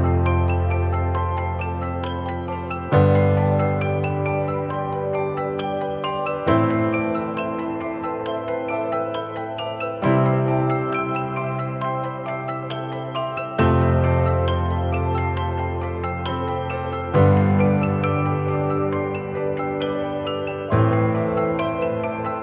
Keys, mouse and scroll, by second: 3.7-4.6 typing, 6.0 typing, 7.1 typing, 8.6 double click, 11.6 typing, 19.0 typing, 19.1 double click.